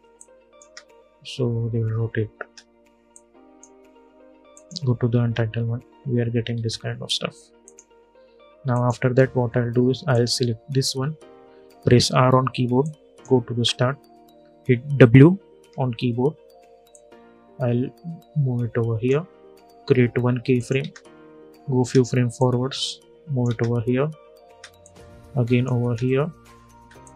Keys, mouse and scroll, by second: 0.3 space, 2.8-4.2 drag, 4.9 space, 7.4 click, 11.5 r, 12.5-15.3 drag, 15.3 w, 16.6-20.5 drag, 20.5 space, 22.1 click, 23.2 space, 24.5 click, 25.5 space, 26.7 click.